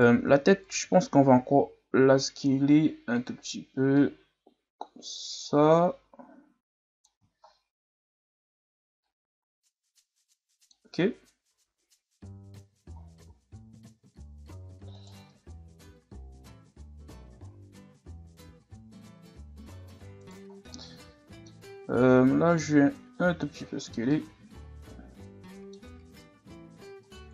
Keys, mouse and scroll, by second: 0.2 Tab, 0.5 a, 0.7 a, 1.9 s, 4.0-7.1 drag, 7.5-9.0 scroll up 3, 9.0-10.9 drag, 10.9 Tab, 11.5 a, 11.7-12.4 scroll down 3, 12.4-13.0 scroll up 5, 13.0 scroll down 1, 13.3-14.7 scroll up 4, 14.7 scroll up 1, 14.9 right click, 15.4 Tab, 16.3 Tab, 16.9-17.4 scroll down 3, 17.4-18.7 scroll up 5, 19.2 Tab, 20.2 right click, 20.5 scroll down 1, 20.7-22.0 middle drag, 22.0-23.6 drag, 23.6 Tab, 23.9 scroll down 1, 24.1-25.8 middle drag, 25.8 scroll up 1, 26.1 Tab, 27.0 right click.